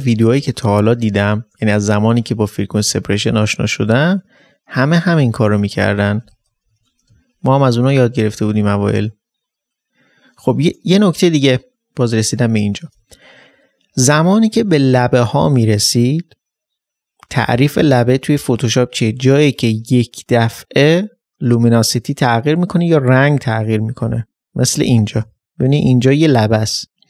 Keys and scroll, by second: 0.4 d, 0.9 space, 5.9-7.1 typing, 11.0 typing, 24.8 ctrl+d, 25.2 ctrl+space.